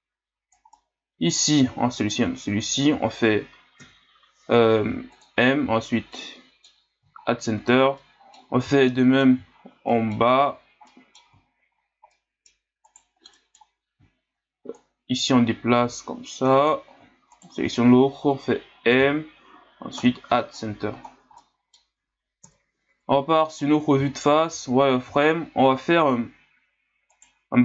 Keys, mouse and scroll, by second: 0.8-2.0 middle drag, 2.0 shift+right click, 3.8 m, 6.1 middle click, 6.8-8.0 scroll down 7, 8.0-9.5 middle drag, 9.5-9.9 scroll up 5, 9.9 middle click, 10.5-10.9 scroll up 2, 10.9 middle click, 11.4 scroll up 4, 12.1 middle click, 12.8 right click, 13.4 middle click, 14.1 scroll up 1, 14.7-17.3 drag, 17.3 shift+right click, 19.0 m, 20.8 a, 21.1 scroll down 4, 21.4-22.4 middle drag, 22.4 KP_1, 23.3 scroll down 6, 23.7-24.0 scroll up 1, 24.0 scroll down 4, 24.5 z, 25.2-25.6 scroll down 6, 25.6-27.1 scroll up 1, 27.1 right click.